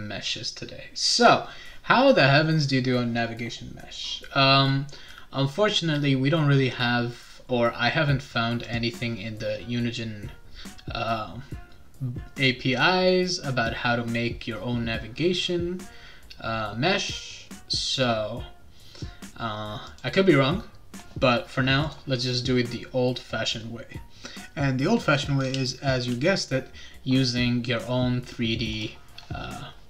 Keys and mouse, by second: 8.6 click, 19.9 click, 21.8 click, 28.7 click.